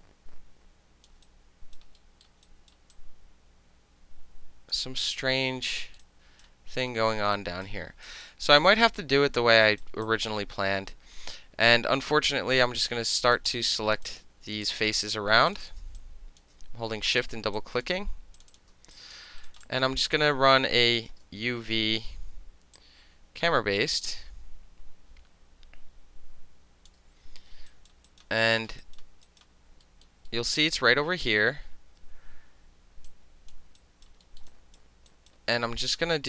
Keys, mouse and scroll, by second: 1.1 alt+middle click, 1.2 alt+right click, 1.7 alt+middle click, 2.2 alt+middle click, 2.4 alt+right click, 2.7 alt+middle click, 2.9-4.7 alt+drag, 5.8 alt+middle click, 6.1 alt+right click, 6.9 alt+middle click, 7.3 alt+right click, 8.0 alt+right click, 8.2 alt+middle click, 8.6 alt+middle click, 8.7 alt+right click, 8.8 alt+middle click, 9.6 alt+right click, 9.8 alt+middle click, 10.0 alt+click, 11.0-11.6 right drag, 13.3 click, 14.0 alt+middle click, 14.0 alt+click, 14.5 alt+middle click, 14.6 alt+click, 14.9 alt+middle click, 15.5 shift+click, 15.5 shift+middle click, 15.6 shift+click, 15.7 alt+shift+middle click, 16.0 alt+click, 16.4 alt+shift+middle click, 17.0 shift+click, 17.1 alt+shift+middle click, 17.2 shift+click, 17.5 alt+click, 17.8 alt+shift+middle click, 18.4 shift+click, 18.5 shift+click, 18.9 alt+click, 19.2 alt+middle click, 19.5 alt+right click, 19.6-21.0 alt+drag, 21.0-22.7 alt+middle drag, 21.2 space, 22.7-26.9 drag, 26.9-27.7 middle drag, 27.7 alt+right click, 27.9 alt+middle click, 28.1 alt+right click, 28.2 alt+middle click, 28.6 alt+middle click, 28.8 alt+right click, 28.9 alt+middle click, 29.2 alt+right click, 29.4-29.8 alt+middle drag, 30.0 alt+middle click, 30.3 alt+middle click, 30.6 alt+right click, 33.1 alt+click, 33.8 alt+right click, 34.0 alt+middle click, 34.4 alt+middle click, 34.5 alt+click, 34.8 alt+middle click, 35.1 alt+click, 35.3-36.2 alt+middle drag.